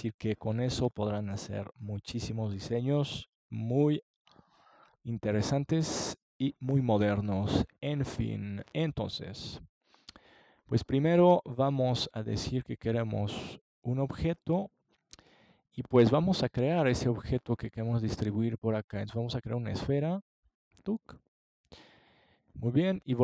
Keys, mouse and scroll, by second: 3.2-5.8 middle drag, 12.5 click, 13.0-14.3 drag, 15.7-17.4 right drag, 22.3-23.2 drag.